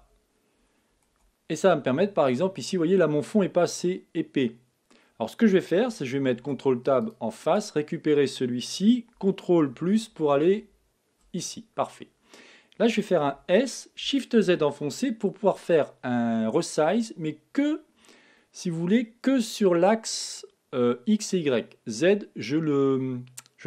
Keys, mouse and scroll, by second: 1.1 Tab, 1.7-3.4 middle drag, 3.8-5.6 middle drag, 7.0 ctrl+t, 7.5-9.2 right drag, 13.3 s.